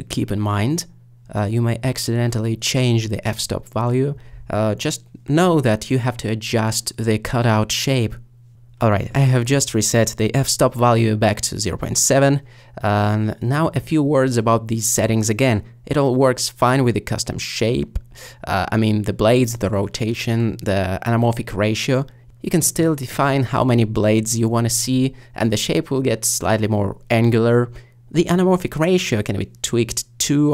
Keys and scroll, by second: 12.1 3, 17.3 5, 22.5 8.